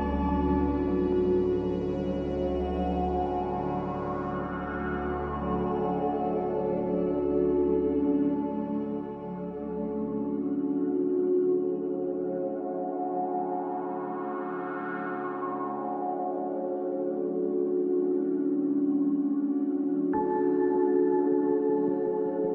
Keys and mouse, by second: 0.6 ctrl+z, 0.9 ctrl+z, 1.5 middle click, 3.0 shift+click, 7.4 e, 15.7-22.5 drag.